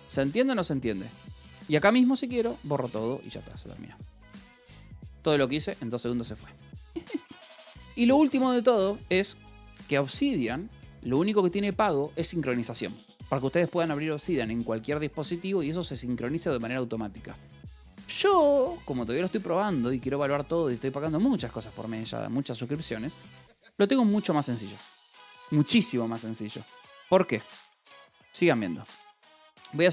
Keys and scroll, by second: 0.0-0.5 typing, 2.2-4.6 typing, 4.3 Return, 6.1-7.2 typing, 17.4-18.2 typing, 18.3 Escape, 19.4 ctrl+s, 22.1 k, 22.7 j, 23.2 k, 26.1 :, 27.5 q, 27.7 Return, 29.1 n.